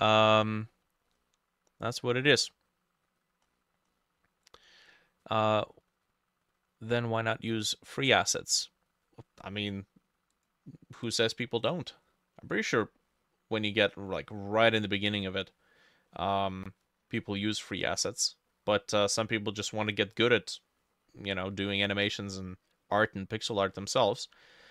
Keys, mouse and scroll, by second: 0.1-0.7 scroll down 1, 0.7-3.2 scroll up 11, 3.5-5.6 scroll up 16, 11.9 middle click, 12.5 middle click, 13.1 middle click, 13.6 middle click, 14.2 middle click, 14.8 middle click, 15.6 middle click, 16.1 middle click, 18.5 middle click, 19.1 middle click, 19.6 middle click, 20.2 middle click, 20.7 middle click, 21.5 middle click, 22.1 middle click, 23.0 middle click, 23.7 middle click, 24.2-24.7 scroll up 3.